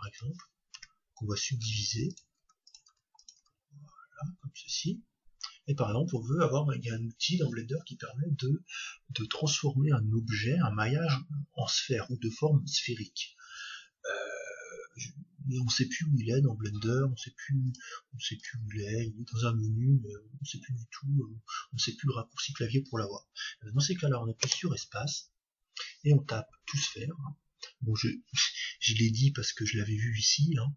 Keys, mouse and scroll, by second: 0.7 Tab, 1.6 w, 2.3 w, 2.9 w, 17.6-20.3 drag, 24.4 space.